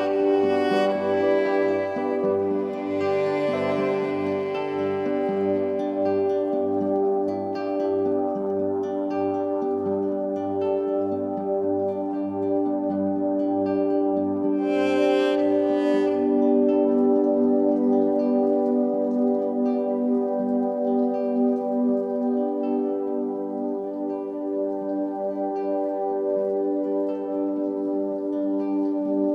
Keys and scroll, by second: 1.0 v, 3.2 i, 4.8 v, 6.5 i, 7.8 v, 17.1 -, 18.4-19.3 typing, 23.4 3, 27.3 i, 28.5 v.